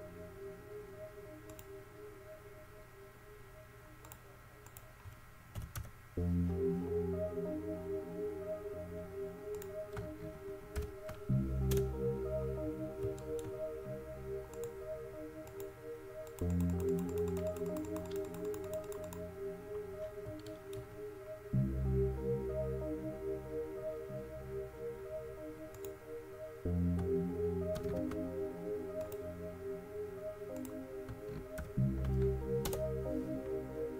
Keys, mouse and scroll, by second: 12.7-14.7 middle drag, 14.7-17.6 drag, 20.2-21.1 middle drag, 28.0 ctrl+c, 28.1 ctrl+c.